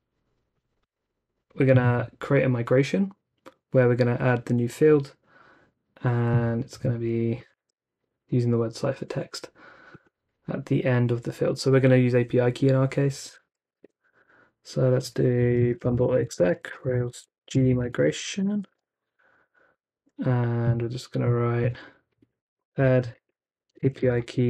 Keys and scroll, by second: 7.5 super+c, 13.0-18.2 typing, 19.4-21.0 typing, 22.4-24.0 typing.